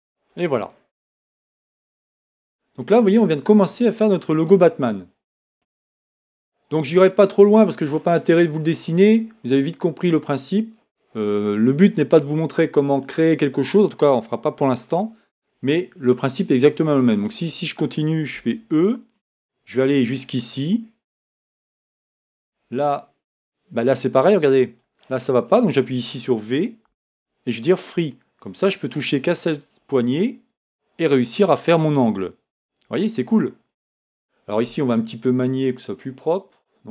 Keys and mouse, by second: 18.3 e, 26.9 v.